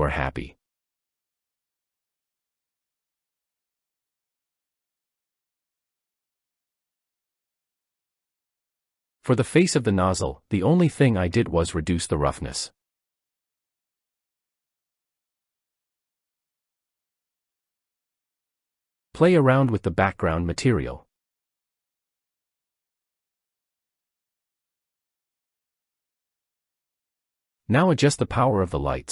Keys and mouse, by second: 19.6 click, 20.5 click, 20.7-21.8 drag, 25.0-26.0 drag.